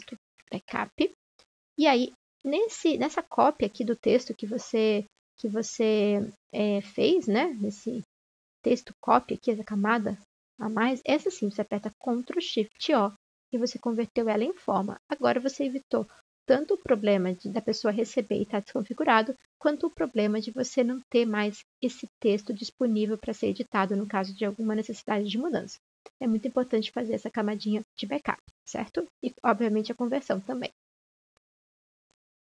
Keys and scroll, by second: 0.0-1.8 typing, 3.4-4.1 typing, 10.9-11.8 typing, 12.8 ctrl+0.